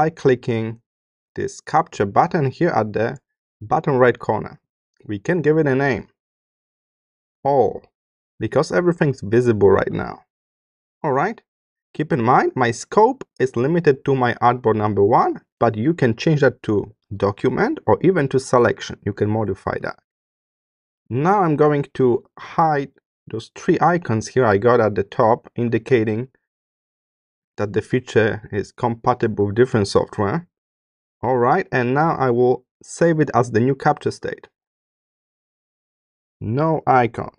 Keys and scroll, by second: 6.9 shift+a, 7.4 shift+\.